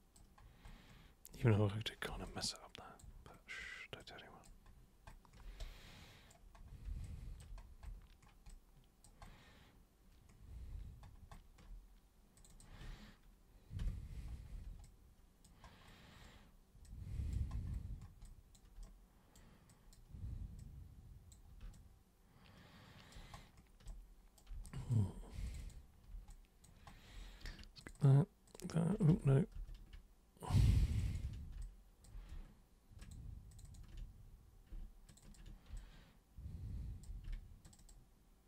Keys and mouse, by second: 2.3 alt+super+click, 4.0-4.4 alt+super+drag, 5.6 super+right click, 7.0 alt+super+click, 8.5 alt+super+click, 12.4 super+click, 12.5 super+click, 14.8-15.4 alt+super+drag, 16.8-17.3 alt+super+drag, 18.2 alt+super+click, 18.8 super+right click, 19.7 super+drag, 20.2 super+w, 20.6 super+click, 21.7-23.1 alt+super+drag, 24.7 alt+super+drag, 25.5 super+click, 26.3 alt+super+click, 27.8 ctrl+shift+super+click, 28.5 ctrl+shift+super+click, 29.1 ctrl+super+z, 29.5 ctrl+super+z, 30.9 ctrl+shift+super+click, 31.0 ctrl+shift+super+click, 31.6-32.0 alt+super+drag, 33.0 ctrl+shift+super+click, 33.5 ctrl+shift+super+click, 33.6 ctrl+shift+super+click, 35.1 ctrl+shift+super+click, 35.8-37.0 alt+super+drag, 37.6 ctrl+shift+super+click.